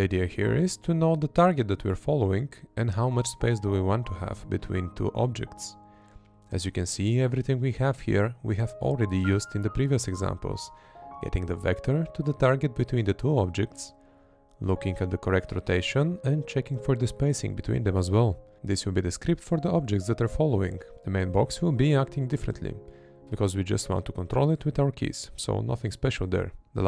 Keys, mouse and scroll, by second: 0.2 Right, 0.8 Left, 1.7 Right, 2.6 Left, 3.4 Right, 5.5 Right, 7.0 Right, 7.7 Right, 9.3 Right, 11.5 Right, 15.4 Right, 16.3 Right, 18.1 Right, 18.5 Right, 19.9 Right, 22.0 Left, 24.9 Left.